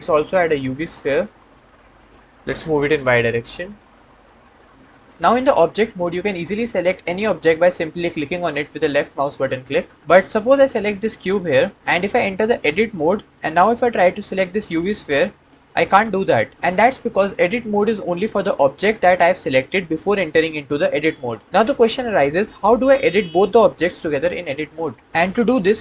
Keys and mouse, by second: 0.2 shift+a, 2.8 g, 3.0 y, 4.0 click, 4.4-5.1 drag, 6.9 click, 7.9 click, 9.2 click, 9.9 click, 12.5 Tab, 14.7 click, 15.0 click, 15.3 click, 15.6 click, 25.0 Tab.